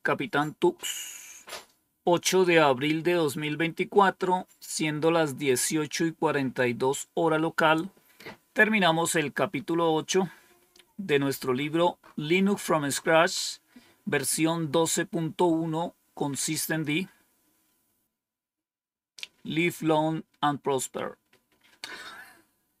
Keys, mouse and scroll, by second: 11.1-12.5 scroll up 2, 12.9-22.8 scroll up 2.